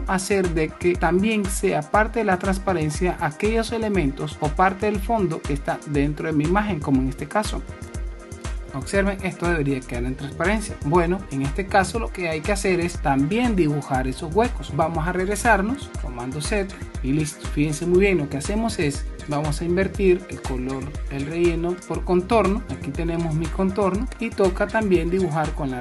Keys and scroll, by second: 10.5 super+-, 11.4 super+-, 15.4 super+z, 16.1 super+z, 16.8 super+z, 21.5 super+space.